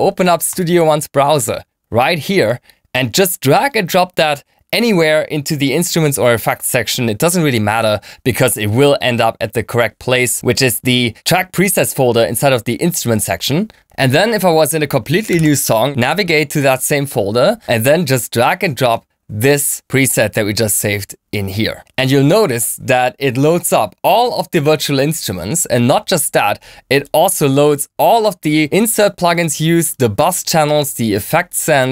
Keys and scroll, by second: 13.7 super+n, 14.4 Return.